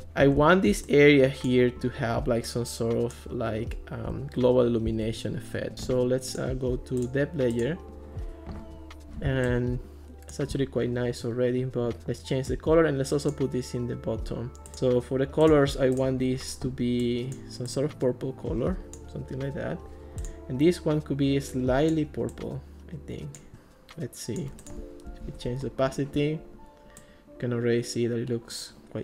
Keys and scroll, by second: 0.4 ctrl+s, 4.9 ctrl+x, 25.1 alt+r.